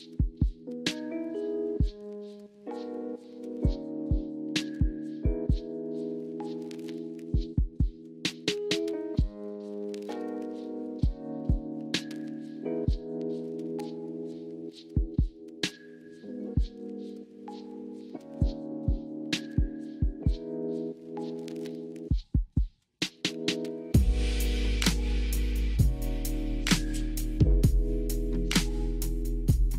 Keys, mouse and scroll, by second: 0.8-1.7 middle drag, 4.1 shift+a, 5.6 s, 6.5 click, 6.9 click, 9.3-15.5 drag, 15.3 KP_0, 18.0 click, 21.8-22.3 middle drag, 23.2 click, 24.5 click.